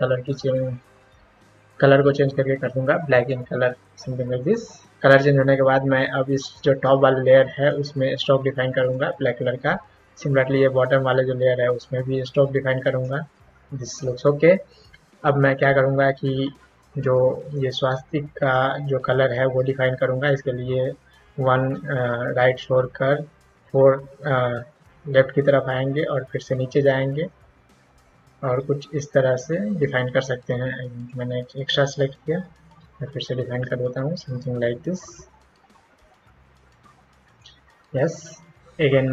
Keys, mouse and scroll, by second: 3.1 click, 4.4 click, 6.5-8.9 drag, 10.8-13.0 drag, 17.5-31.1 drag, 32.3 ctrl+z, 33.5-37.4 drag.